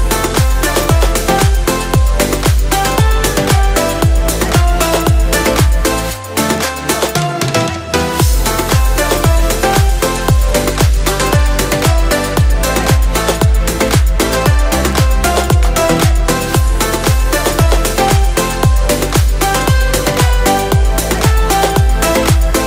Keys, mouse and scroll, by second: 0.5-1.2 shift+middle drag, 2.4 click, 4.7 click, 5.1-6.0 scroll down 2, 6.0-7.5 drag, 7.8-8.9 drag, 9.3 click, 9.7-10.2 scroll down 2, 10.2-11.3 drag, 11.0 KP_0, 11.7-12.3 scroll down 2, 12.7 click.